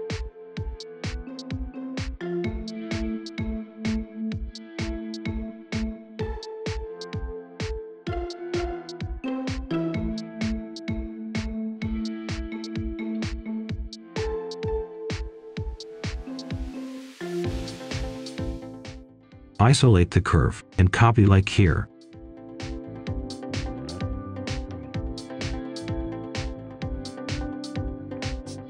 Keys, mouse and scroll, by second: 0.3 scroll up 1, 0.5 right click, 1.0 scroll down 1, 1.1 scroll up 1, 1.3 right click, 1.8 scroll down 1, 2.1 scroll up 1, 2.2 right click, 3.2-3.6 scroll up 1, 3.6 scroll down 1, 3.9 right click, 4.6 scroll up 1, 4.8 right click, 5.2-5.8 scroll down 1, 5.8 click, 6.3-9.2 right drag, 9.2 Return, 9.4-10.5 typing, 11.7-14.1 drag, 14.5 Delete, 15.2 click, 15.8 scroll up 1, 16.6 click, 18.6-19.6 typing, 18.9 Return, 19.2 click, 19.8 Return, 21.1 click, 22.6 Escape, 23.1 click, 23.4-23.8 scroll down 1, 23.8 right click, 24.1 Escape, 24.1 click, 24.7 Escape, 24.9 click, 25.6 right click, 25.9-26.9 typing, 27.5 scroll down 1, 27.8 right click.